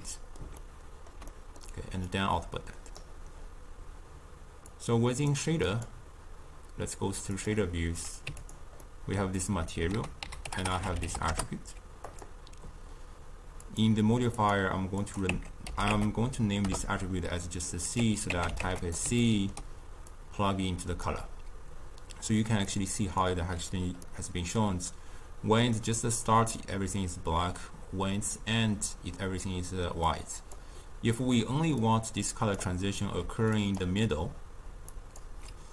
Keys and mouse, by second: 2.0-8.1 drag, 8.1 q, 8.8-9.8 middle drag, 9.8 ctrl+a, 10.5 t, 13.5 click, 14.3-18.8 drag, 19.1-20.0 ctrl+middle drag, 20.0-23.9 drag, 23.9-27.5 middle drag, 30.0-33.1 drag, 33.1 d, 33.4 click, 33.7-35.3 d, 34.8 click, 35.0 d.